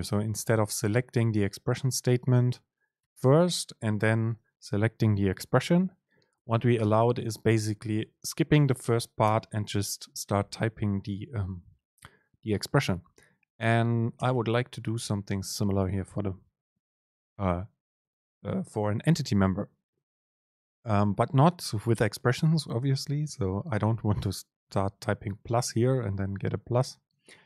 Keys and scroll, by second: 0.6 super+space, 6.9 BackSpace, 7.6 Return, 8.0 super+space, 14.3 BackSpace.